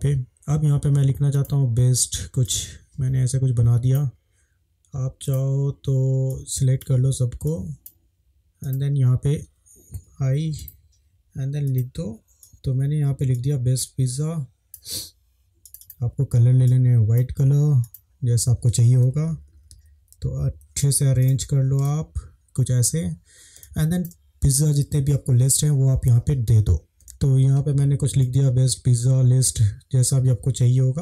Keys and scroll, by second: 12.2-13.0 typing, 19.2 Down, 19.4 Down, 19.5 Down, 19.7 Down, 20.4 Down, 20.5 Right, 21.8 space, 26.9 ctrl+v.